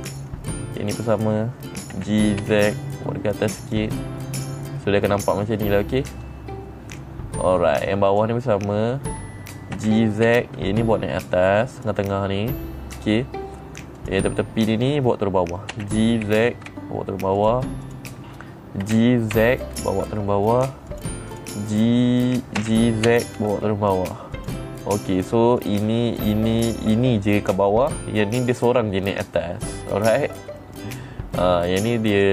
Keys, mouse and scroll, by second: 0.0 click, 0.3 middle click, 1.4 click, 2.4 g, 4.1 click, 4.5-7.9 middle drag, 8.6 click, 10.3 g, 12.2 click, 12.6-13.6 middle drag, 14.5 click, 16.2 g, 17.9 click, 18.3 click, 19.4 g, 21.4 click, 21.8 click, 23.1 g, 24.8 click, 26.1 click, 26.7 click, 27.4 click, 29.0 click, 29.5-30.6 middle drag, 31.1 middle click.